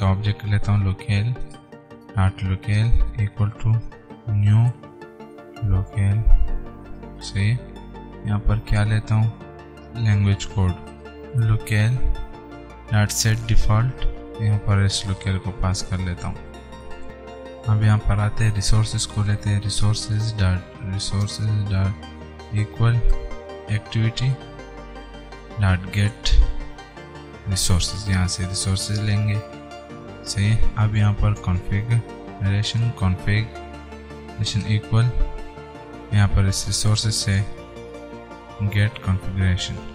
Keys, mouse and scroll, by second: 0.1-6.8 typing, 1.8 Return, 5.5 Return, 7.2 Return, 10.1-16.0 typing, 12.6 alt+Tab, 14.2 Return, 16.5 Return, 17.0 Right, 18.5-21.7 typing, 20.1 Return, 21.3 Return, 23.0-24.4 typing, 23.3 alt+Tab, 25.4-26.9 typing, 27.6 Return, 28.5 typing, 29.4 Return, 31.5 shift+c, 31.9 n, 32.5 Return, 33.0-36.9 typing, 34.0 Return, 35.4 alt+Tab, 38.2 Return, 38.4-39.9 typing.